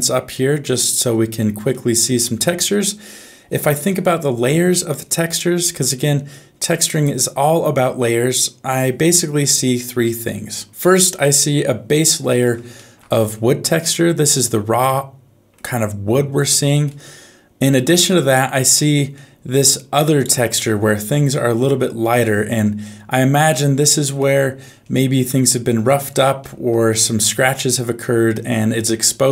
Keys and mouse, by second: 1.7 middle click, 5.9-8.7 middle drag, 11.2 middle click, 12.7 shift+middle click, 13.6 middle click, 14.8 middle click, 16.9 middle click, 19.1 middle click, 21.6 shift+middle click, 22.8 middle click, 23.9 shift+middle click, 26.4 shift+middle click, 26.8 middle click, 28.7 middle click.